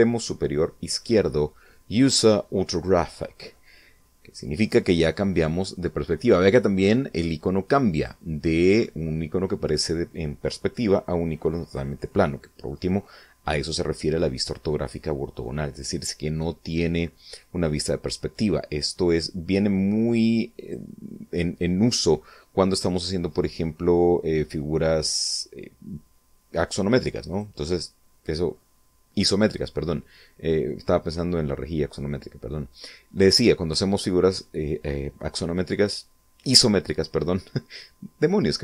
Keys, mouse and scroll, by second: 7.7 click, 10.4 click, 11.4 click, 20.4 click, 27.1 click.